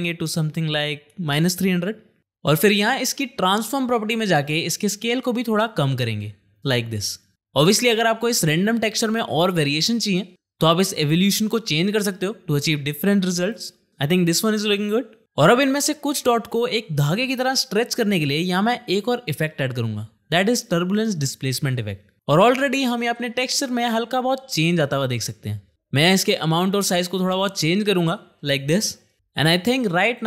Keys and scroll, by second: 0.7 -, 0.9 KP_3, 1.2 KP_0, 1.3 0, 1.7 Return, 20.4 ctrl+space, 20.7-22.0 typing.